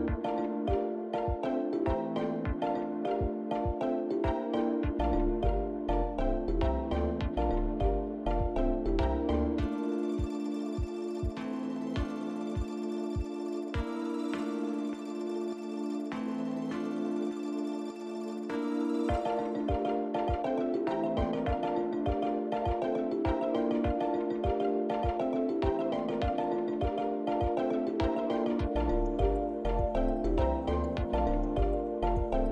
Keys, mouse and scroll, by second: 0.0 click, 1.9 click, 3.6 shift+click, 4.1 shift+click, 4.3 click, 5.1 click, 6.6 shift+click, 7.1 scroll down 1, 8.6 shift+click, 11.0 shift+click, 11.6 middle click, 13.7 shift+click, 14.4 shift+click, 16.1 ctrl+l, 18.5 KP_1, 19.6 middle click, 20.8 click, 21.2-21.7 scroll down 2, 21.9 middle click, 22.8-23.5 scroll up 2, 23.5 click, 30.2 click, 31.7 KP_Decimal.